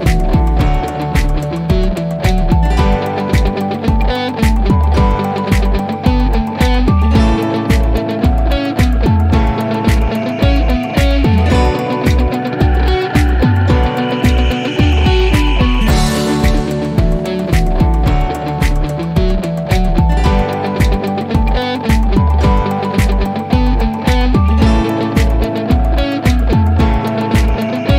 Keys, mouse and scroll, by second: 2.4 Return, 6.1 click, 8.2 click, 12.3 click, 16.3 click, 18.9 typing, 19.6 Return, 20.7 click, 24.9 typing, 25.6 Return, 27.2-27.9 drag.